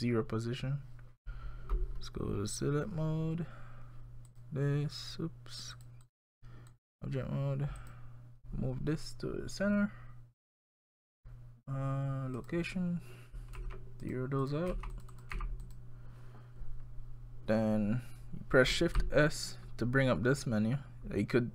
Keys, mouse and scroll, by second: 0.0 click, 2.5 click, 4.3 click, 5.7 click, 6.0 click, 7.8 click, 10.6 click, 12.4 click, 14.4 click, 15.1 click, 19.0 shift+s.